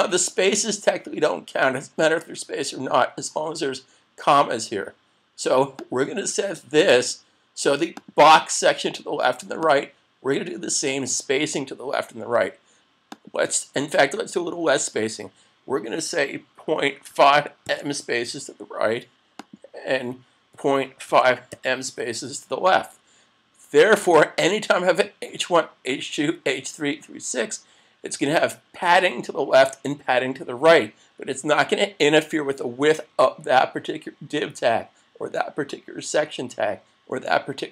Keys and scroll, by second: 27.1 super+s.